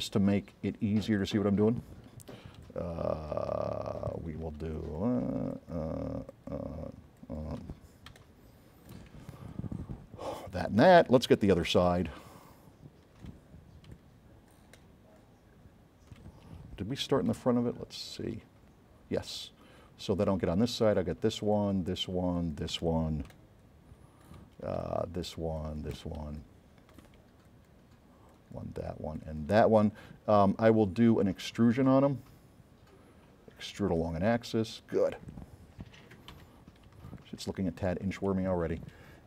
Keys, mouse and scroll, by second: 1.3 click, 2.8-4.5 drag, 2.8 s, 4.9-5.3 shift+drag, 5.6 shift+click, 6.4 shift+click, 7.3 shift+click, 8.3 click, 8.3 s, 9.6 shift+click, 10.4 shift+click, 11.9 s, 12.0-13.4 right drag, 14.0-15.4 drag, 14.0 s, 15.6 middle click, 17.5 right click, 17.5 s, 20.8 shift+click, 21.6 shift+click, 22.5 shift+click, 23.4 click, 23.4 s, 24.9 shift+click, 25.7 shift+click, 26.3 s, 26.5 click, 31.1 right click, 34.1 click, 36.4 a, 37.1 s, 37.2-38.9 right drag.